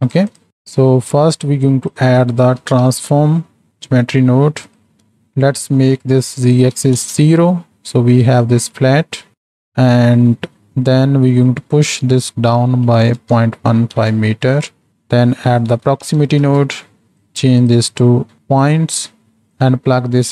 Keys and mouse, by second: 0.3 shift+click, 0.5 middle click, 1.7-4.7 drag, 6.4 click, 9.2 middle click, 9.4 click, 9.9 middle click, 11.9-14.0 drag, 14.9-17.2 drag, 17.7-18.4 drag, 18.7 click, 19.5-20.3 drag.